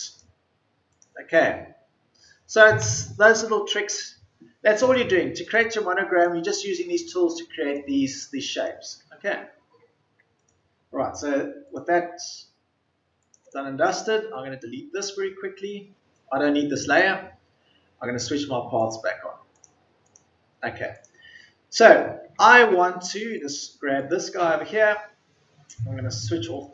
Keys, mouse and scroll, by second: 11.2 Delete, 11.8 Delete.